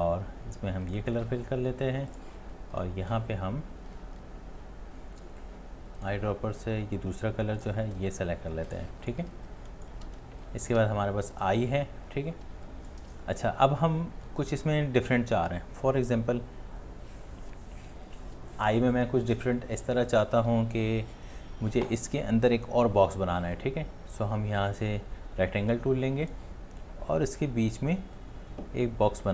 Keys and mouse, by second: 9.3 space, 9.8 click, 9.8 click, 9.8 click, 9.9 space, 10.0 space, 10.2 space.